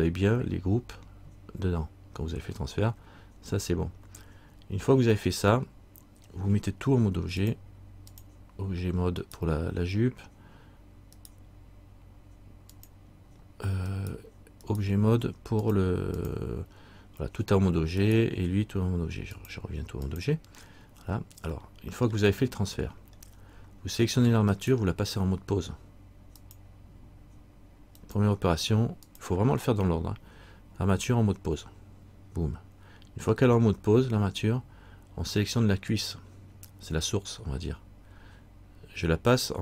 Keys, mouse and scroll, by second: 5.0 scroll up 1, 7.6 click, 7.6-8.6 scroll up 1, 9.4 right click, 12.9 click, 14.1 right click, 15.8 click, 18.2 right click, 19.5 click, 21.8 middle click, 23.3 scroll down 1, 24.7 right click, 26.5 click, 36.1 right click.